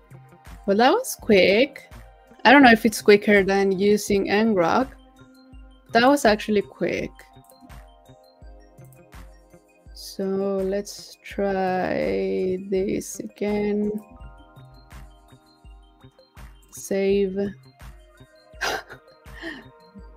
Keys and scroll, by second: 14.4 super+v.